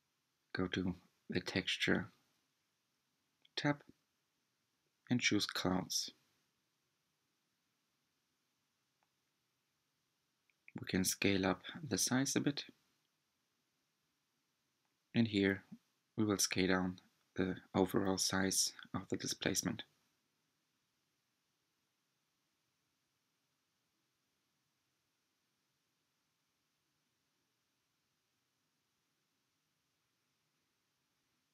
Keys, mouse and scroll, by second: 1.5 click, 2.9-6.0 drag, 8.4-11.5 drag, 13.3 click, 15.2-19.8 drag, 21.1 click, 22.6-25.7 drag, 27.2 click, 28.8 click, 30.1-31.1 middle drag, 31.1-31.4 scroll down 2, 31.4-31.5 shift+middle drag.